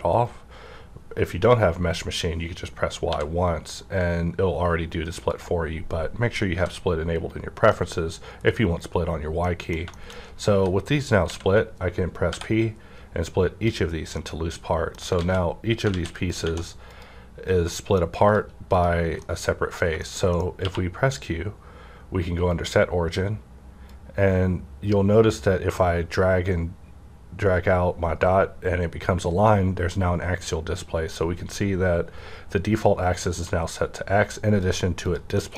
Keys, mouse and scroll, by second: 0.1 right click, 3.1 right click, 3.1 y, 5.3 click, 6.5 g, 7.1 right click, 7.6-9.9 middle drag, 9.9 shift+scroll up 1, 10.0 shift+scroll down 1, 10.4 g, 11.0 right click, 12.2 p, 13.2-14.8 drag, 14.2 middle click, 14.8 alt+scroll up 1, 15.2 alt+a, 15.9 alt+a, 16.2 click, 16.4 click, 16.8 -, 17.6 middle click, 17.9 scroll down 1, 18.2 click, 19.2-20.5 middle drag, 20.5 q, 22.5 click, 23.8-35.4 drag, 35.4 middle click, 35.5 scroll up 1.